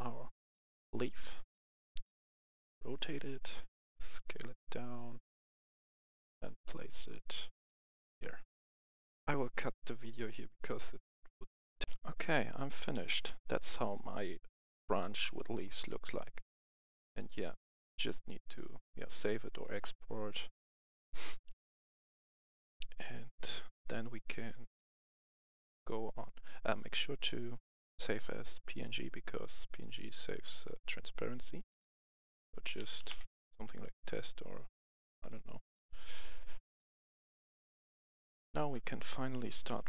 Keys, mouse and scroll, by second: 4.0-5.6 shift+drag, 5.9-8.1 drag, 8.8 F11, 9.3 F10, 11.8 click, 12.5 F10, 15.7-16.4 scroll up 1, 18.2-32.6 drag, 32.7-33.1 typing, 35.2 click, 38.1 F11, 38.7 F10, 38.9 click.